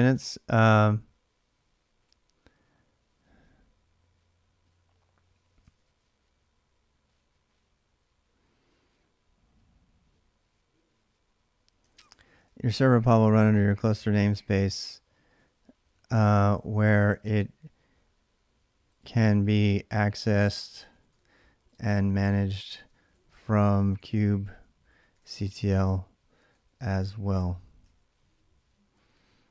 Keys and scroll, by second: 0.0-0.5 typing, 1.8 typing, 5.4 ctrl+[, 5.6 typing, 11.6-12.7 typing, 13.8-29.5 typing.